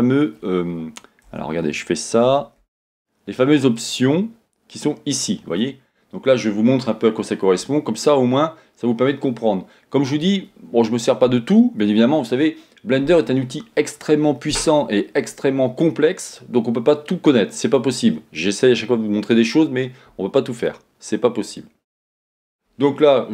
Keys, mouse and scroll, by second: 1.2 Tab, 2.2 a, 2.9-23.3 right drag.